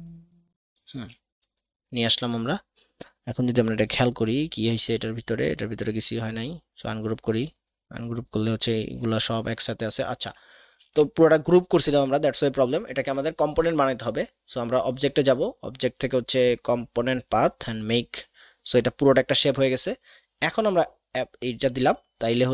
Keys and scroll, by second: 10.8 ctrl+g.